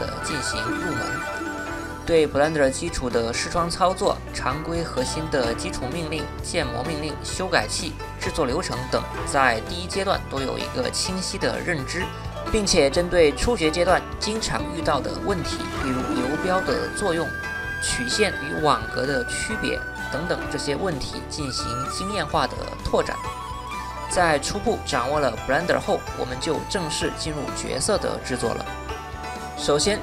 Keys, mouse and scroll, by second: 0.1 Tab, 0.3 Tab, 0.7 click, 1.1 Tab, 1.7 Tab, 1.8 1, 1.8 2, 1.8 3, 2.0 middle click, 2.3 middle click, 2.6 Tab, 2.6 click, 2.8 middle click, 3.6-4.1 drag, 4.2 click, 4.4 1, 4.5 middle click, 4.7 click, 5.2 click, 5.8 Tab, 5.9 click, 7.3 middle click, 8.4 middle click, 10.4 click, 12.6 middle drag, 12.8 middle click, 13.0 middle click, 14.5 click, 14.8 middle click, 15.2 middle click, 15.5 shift+a, 15.7 ctrl+shift+z, 15.7 shift+middle drag, 16.7 middle click, 17.1 shift+s, 18.2 shift+middle click, 18.4 shift+middle click, 18.6 shift+s, 19.0 middle click, 19.1 shift+s, 19.1 middle click, 19.5 shift+s, 19.6 shift+middle click, 20.0 middle drag, 20.1 shift+middle click, 20.5 right click, 21.0 click, 21.2 middle drag, 21.7 right drag, 22.4 Tab, 22.8 shift+middle click, 23.0 shift+s, 23.4 middle click, 23.6 Tab, 23.8 click, 24.4 middle drag, 24.6 middle drag, 25.1 s, 25.2 z, 25.3 shift+click, 25.9 Tab, 26.0 shift+middle click, 26.2 shift+middle click, 26.5 click, 27.0 m, 27.2 Tab, 27.4 shift+s, 27.5 Tab, 27.6 click, 28.5 middle click, 29.1 middle drag.